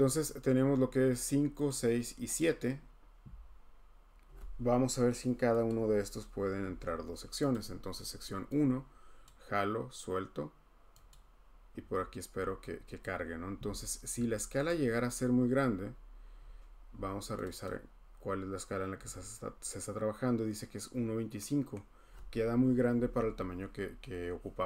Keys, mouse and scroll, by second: 1.3 click, 1.7 click, 2.4 click, 5.7 click, 9.2 click, 11.1 click, 11.9-12.5 scroll, 14.6 click, 16.3-17.4 scroll, 17.4 click, 17.6 click, 20.8-21.8 scroll.